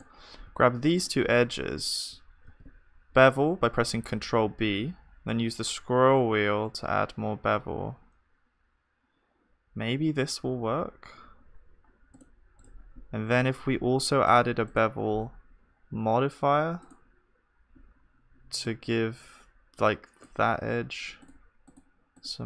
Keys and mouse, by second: 1.1-3.0 drag, 2.5 ctrl+b, 13.3 Tab, 13.3-14.6 right drag, 14.6-16.9 drag.